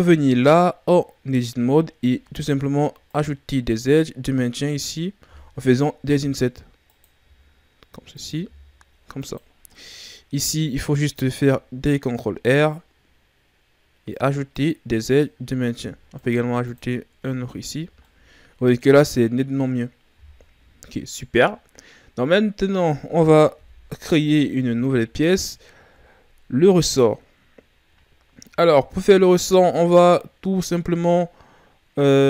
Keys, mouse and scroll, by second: 0.4-1.5 middle drag, 1.5-2.2 scroll up 1, 2.2 ctrl+Tab, 3.7 right click, 6.1 i, 7.2 i, 8.4 i, 9.5 scroll down 2, 9.7-11.1 middle drag, 11.1 ctrl+r, 15.0 click, 15.7 ctrl+r, 17.1 Tab, 17.8 scroll down 2, 18.0-19.2 middle drag, 19.2-22.3 scroll up 2, 23.5 KP_1, 24.6 a, 25.2-27.4 scroll down 9, 27.4-29.4 scroll down 4.